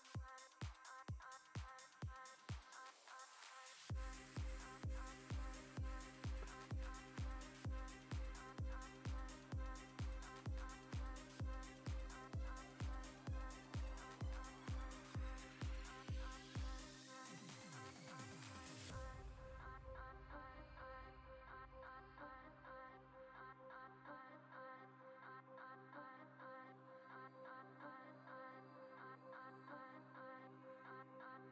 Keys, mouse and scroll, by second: 0.2 g, 1.2 click, 1.6 click, 1.9 click, 2.4 g, 3.5 click, 3.8 click, 4.2 click, 4.9 click, 5.4 g, 9.9-11.2 middle drag, 11.9 click, 12.3 click, 12.6 shift+click, 14.9 middle click, 15.3 KP_0, 16.8 click, 18.9 click, 22.8 click, 25.0 click, 28.1 click.